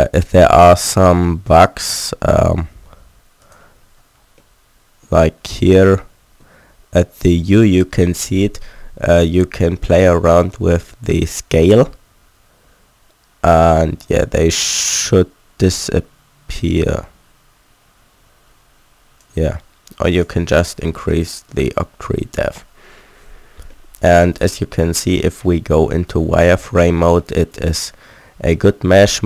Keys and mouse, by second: 3.6 click, 4.5-7.5 middle drag, 10.4-18.2 drag, 20.2-21.2 drag, 21.2-24.0 middle drag, 23.4 z, 27.1-28.5 middle drag.